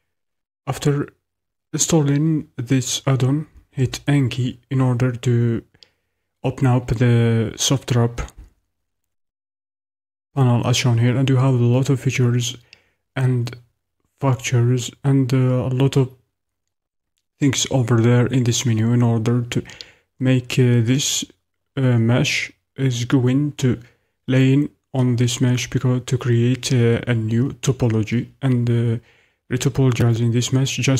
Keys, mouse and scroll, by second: 3.7 n.